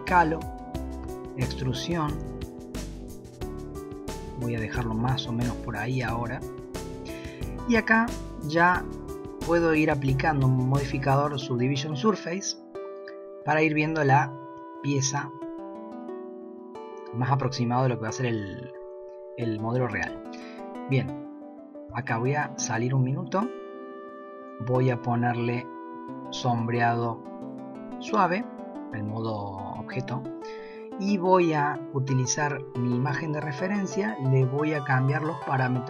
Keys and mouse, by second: 10.8-12.9 drag, 14.7 shift+middle click, 15.1 shift+click, 16.1 shift+middle click, 16.2 shift+click, 21.9 Tab, 24.9-28.0 drag, 31.2 click.